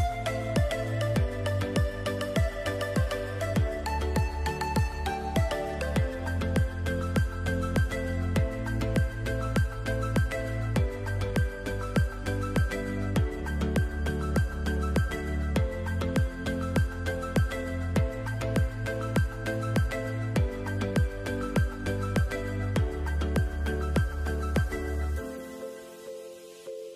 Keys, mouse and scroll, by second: 0.4 alt+scroll up 1, 1.3 shift+click, 6.3 alt+click, 7.5 ctrl+z, 8.0 click, 9.2 scroll up 1, 11.8 scroll down 1, 12.3 click, 12.7 scroll down 1, 13.4-13.7 scroll up 3, 14.1 scroll up 1, 14.9 scroll down 1, 16.1 scroll down 1, 16.4-17.6 alt+scroll up 2, 17.6 click, 22.6 click, 25.3 click.